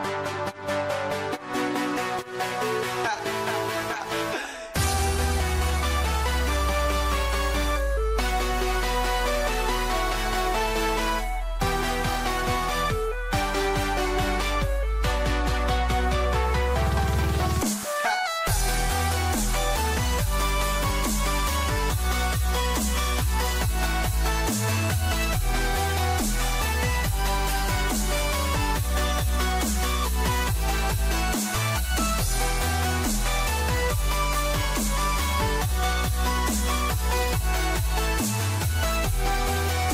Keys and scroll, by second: 28.1 ctrl+-, 28.5 ctrl+0, 29.1 ctrl+=, 29.7 ctrl+-, 30.5 ctrl+shift+a, 32.0 ctrl+=, 34.0 ctrl+alt+z.